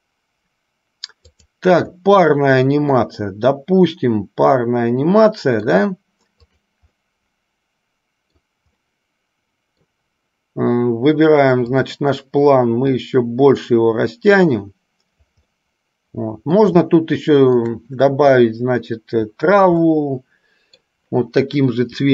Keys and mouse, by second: 1.4 click, 3.1-5.9 middle drag, 6.7 click, 7.1-8.7 middle drag, 9.1-10.1 middle drag, 12.9-15.6 drag, 15.7-16.8 middle drag, 17.1-17.9 shift+middle drag, 20.2-21.2 middle drag.